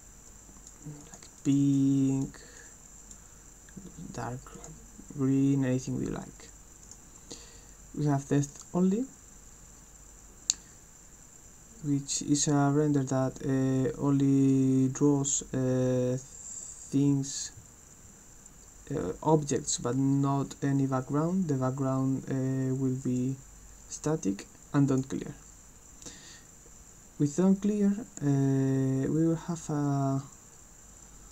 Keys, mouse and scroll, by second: 0.2 click, 1.0 click, 1.4 click, 1.8 click, 2.6 click, 4.5 click, 6.8 click, 8.5 click, 23.0 click, 24.8 click.